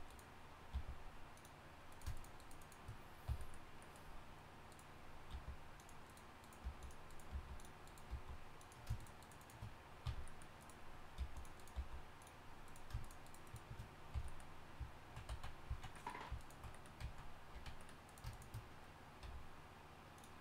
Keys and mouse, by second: 0.7 g, 3.3 f, 5.3 g, 6.6 g, 7.3 g, 8.1 g, 10.0 f, 11.2 g, 11.7 g, 14.3 f, 15.7 z, 17.0 z, 17.5 z, 19.2 v.